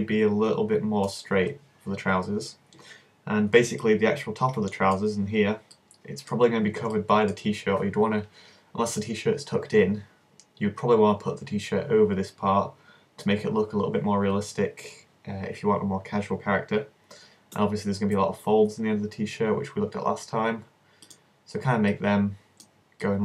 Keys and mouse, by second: 4.9-6.2 middle drag, 7.1-8.5 middle drag, 17.6 s, 21.2-23.1 drag, 23.1-23.2 middle drag.